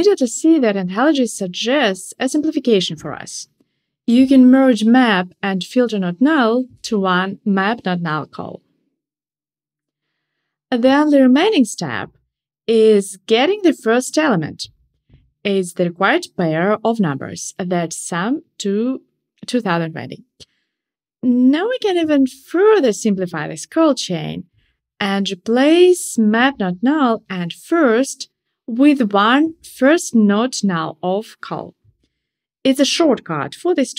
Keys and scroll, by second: 26.0 alt+shift+Right.